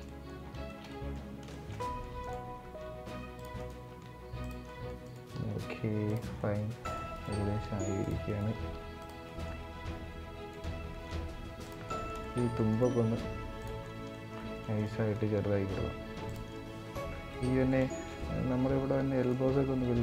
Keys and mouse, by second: 0.4 shift+middle click, 0.6 middle drag, 1.2 shift+middle drag, 1.9 right click, 2.3 ctrl+a, 3.3 right click, 3.8 ctrl+a, 4.3 middle click, 4.8 right click, 5.1 ctrl+a, 6.1 middle click, 6.5 right click, 6.8 right click, 7.3 ctrl+a, 8.0 right click, 8.3 ctrl+a, 9.0 middle click, 9.3 Tab, 9.7 Tab, 10.2 click, 10.7 ctrl+a, 11.5 middle click, 12.0 shift+middle click, 12.2 middle click, 12.4 right click, 13.0 ctrl+a, 13.5 middle drag, 14.1 middle click, 14.5 right click, 15.0 ctrl+a, 16.2 middle click, 17.0 middle click, 17.6 shift+middle click, 17.9 middle click, 18.9 right click, 19.3 ctrl+a.